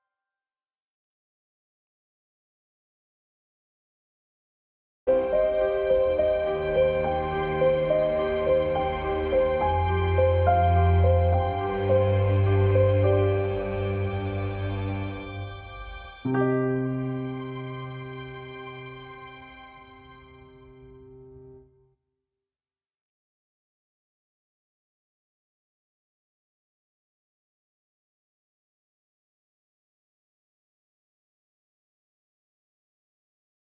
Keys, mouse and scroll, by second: 25.2 click, 27.5 F1, 28.2 F1, 32.6 F1.